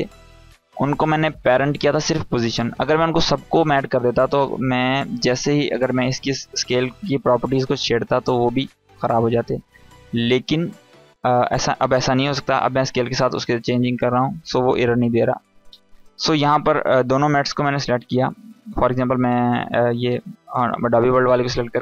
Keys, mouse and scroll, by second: 0.9 click, 5.7 click, 13.1-15.2 drag, 17.2 click.